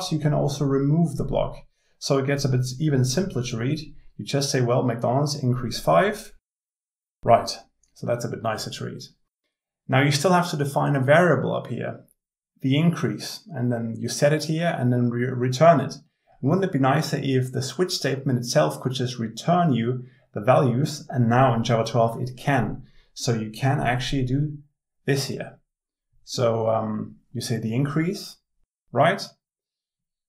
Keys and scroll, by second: 5.6 alt+Return.